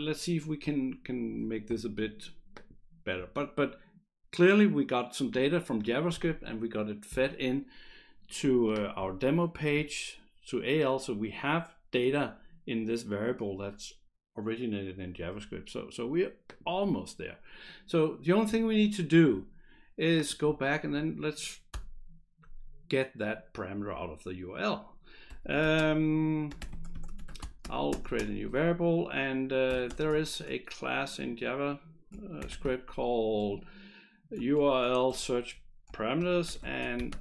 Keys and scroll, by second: 21.7 Return, 25.0-30.4 typing, 32.2-33.1 typing, 34.6 shift+s, 35.1 Return, 35.9-37.2 typing.